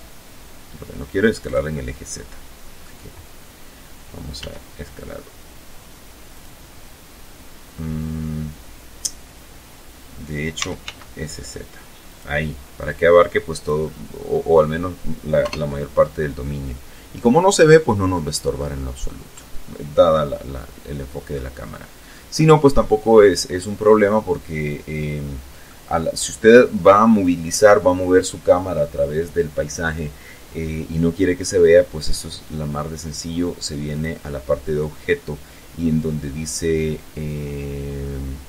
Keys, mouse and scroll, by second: 0.0 click, 0.3-1.6 middle drag, 3.0 s, 4.9 click, 9.1 s, 9.4 z, 10.7 click, 11.4 click, 12.4 right click, 12.5-12.8 scroll up 1, 13.9 KP_0, 17.2 click, 18.7-20.0 drag, 20.0-20.7 scroll up 1, 20.7 click, 24.2-25.2 drag, 32.5 click, 33.4-33.9 scroll down 1, 36.5 scroll down 1, 38.4 click.